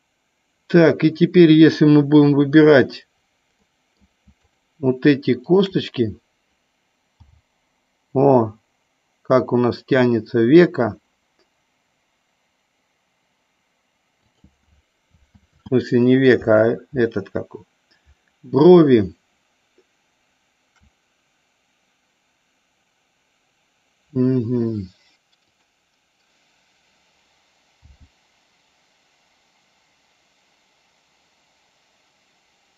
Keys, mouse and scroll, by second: 3.7 middle click, 5.5 shift+click, 7.4 g, 14.3 click, 15.7 ctrl+z, 27.9 g.